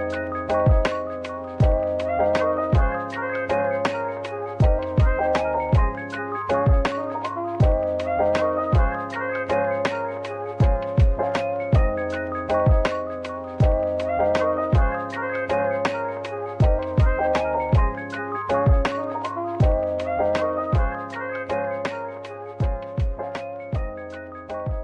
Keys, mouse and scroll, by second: 9.0 middle click, 10.4 z, 11.4-12.4 scroll up 1, 23.4-24.8 scroll down 1.